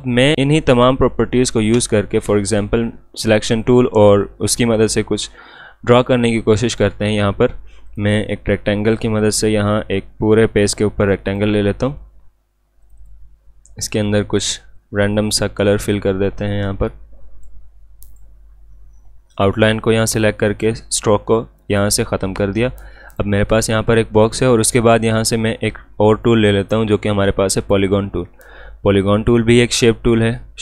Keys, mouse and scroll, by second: 6.6 right click, 7.9-18.1 drag, 21.5 click, 21.7 click, 26.1 right click, 27.6 click.